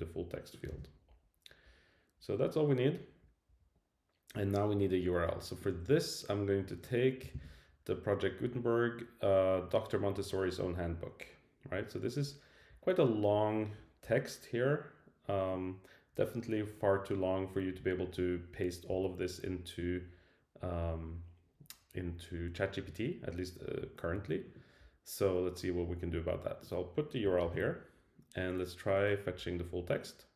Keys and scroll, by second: 0.7 super+v, 7.3 super+c, 27.4 super+v.